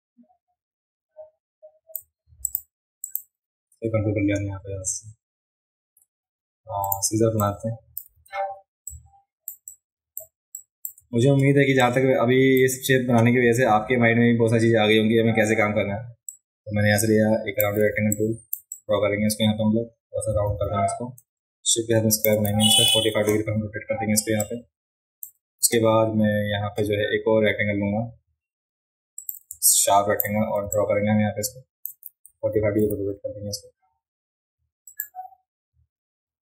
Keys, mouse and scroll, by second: 2.4 click, 3.1 click, 6.8 click, 7.4-8.0 drag, 8.8-9.5 drag, 8.8 space, 9.7 click, 10.6 click, 11.8 click, 16.3-17.6 drag, 17.9 space, 18.1 click, 18.7-22.2 drag, 24.4 shift+click, 29.2 click, 29.5 space, 29.7 click, 30.7-31.8 shift+drag, 32.8 v, 34.9 shift+click.